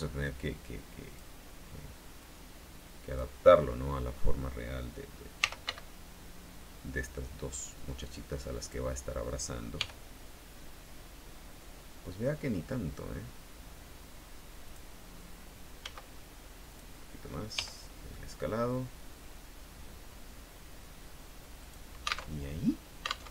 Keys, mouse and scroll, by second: 0.1-1.5 drag, 2.3-3.5 drag, 5.3-6.3 typing, 8.8 click, 9.9 g, 14.8 click, 15.9 s, 16.9 click, 17.7 g, 21.7 click, 22.5 alt+Tab.